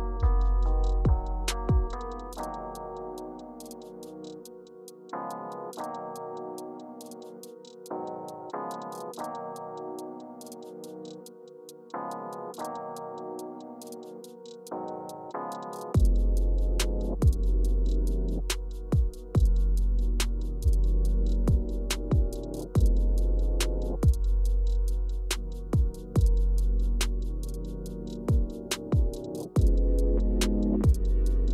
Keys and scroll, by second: 1.2 typing, 3.5 Left, 3.6 Left, 4.2 Right, 8.1 Down, 8.3 Down, 9.2 Up, 13.1 Return, 13.8 Up, 14.2 Left, 15.1 Return, 16.0 typing, 21.8 Return, 24.9 Return, 29.1 Return.